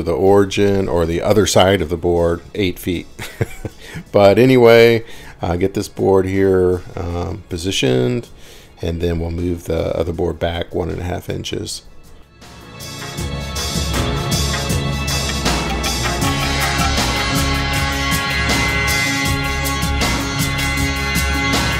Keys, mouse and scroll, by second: 1.3 click, 3.7 Right, 3.8 Right, 4.3-5.3 Right, 5.8 scroll, 6.7 scroll up 10, 10.5-13.5 drag, 14.6-15.2 scroll up 10, 14.7 middle click, 15.2-16.0 scroll down 16, 18.0 scroll up 11, 18.2 middle click, 19.3 middle click, 19.9-21.1 scroll up 12.